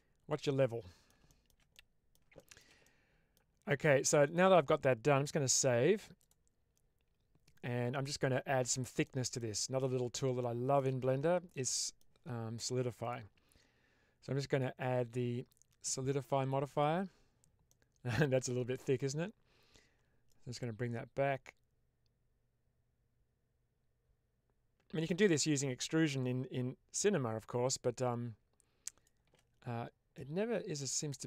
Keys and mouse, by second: 0.6-1.0 middle drag, 1.2 shift+middle drag, 1.6-2.0 middle drag, 2.2-2.5 shift+middle drag, 2.7-3.2 middle drag, 4.1 click, 5.4 ctrl+s, 8.9-9.3 middle drag, 9.5 shift+middle click, 10.4-10.7 shift+middle drag, 11.4-12.0 middle drag, 14.4-16.8 drag, 17.6-18.9 middle drag, 20.3-29.0 shift+drag, 30.0-31.2 middle drag.